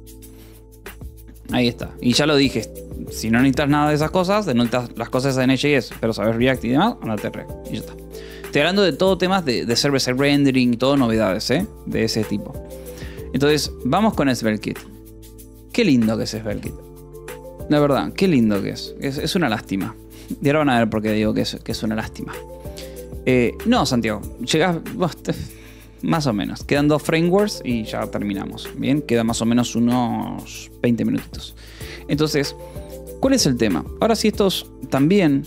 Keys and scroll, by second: 34.7 BackSpace.